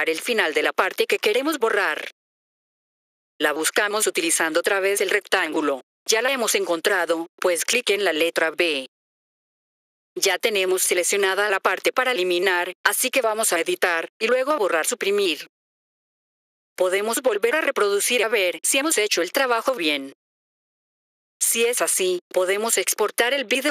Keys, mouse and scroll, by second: 1.7 click, 2.1 typing, 8.8 click, 14.6 click, 17.8 click, 19.7 click, 20.3-22.6 typing, 22.1 click.